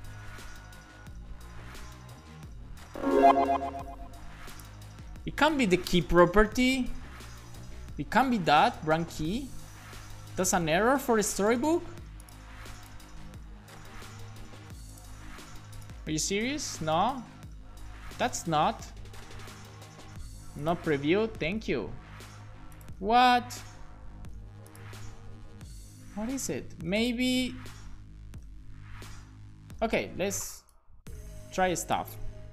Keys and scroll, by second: 6.1-9.2 typing, 8.1 Left, 9.7 shift+Up, 10.0 Down, 10.4 Return, 10.6 super+s, 11.2 alt+shift+f, 11.5 super+s, 28.9 BackSpace, 29.3 shift+[, 29.5 Return.